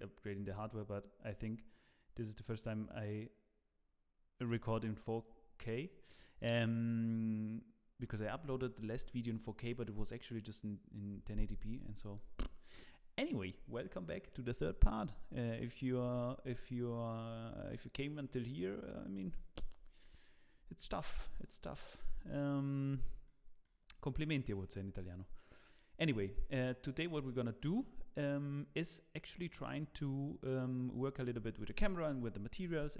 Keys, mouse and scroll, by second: 5.7 middle click, 11.7 middle click, 16.5-16.9 scroll down 1, 16.9 click, 17.5 middle click, 18.4 middle click, 19.3 shift+middle click, 20.0 middle click, 20.5 scroll up 2, 20.9 shift+middle click, 21.3 middle click, 25.2 middle click, 27.2 shift+middle click, 29.4 middle click.